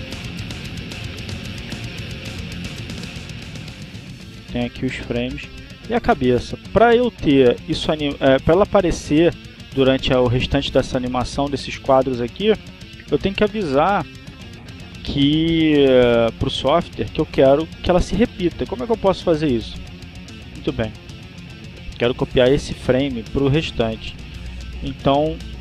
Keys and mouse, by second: 1.2 click, 3.1 click, 4.4 click, 5.6-7.3 drag, 7.5-9.1 drag, 9.3 click, 10.3 click, 11.1 click, 16.2 click, 17.8 click, 18.8 right click.